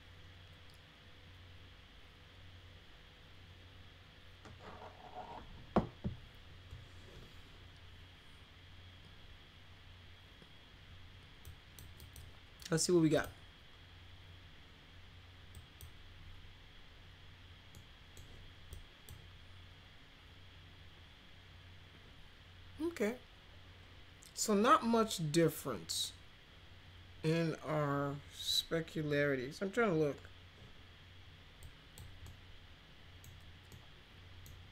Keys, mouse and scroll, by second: 11.4 click, 12.0 click, 13.1 click, 15.5 drag, 17.7 middle click, 18.7-19.0 drag, 31.6-31.9 drag, 32.2 middle click, 33.7-34.4 middle drag.